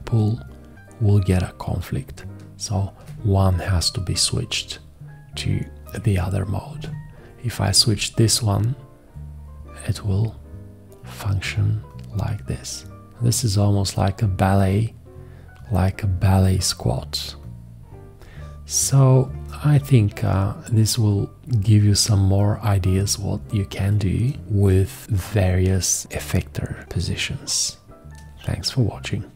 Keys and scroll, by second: 24.4 space.